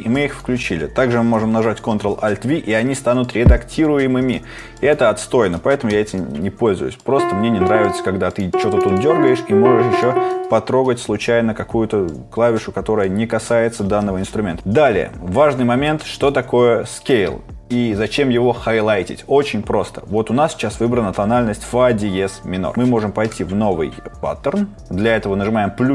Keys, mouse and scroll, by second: 1.0 ctrl+alt+v.